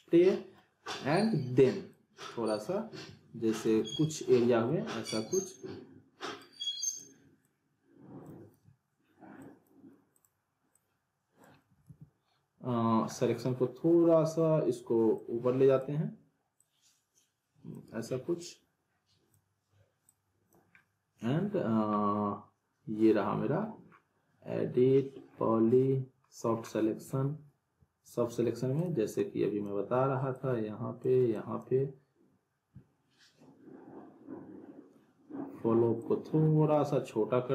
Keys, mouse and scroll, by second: 0.3 middle click, 1.9-2.5 click, 3.9 ctrl+z, 5.0-7.0 alt+drag, 11.8 ctrl+z, 13.1 middle click, 15.1-16.1 drag, 20.7-23.9 scroll up 1, 25.6-26.2 scroll down 1, 27.0-28.0 scroll up 1, 28.8-29.8 drag, 36.0-37.5 drag.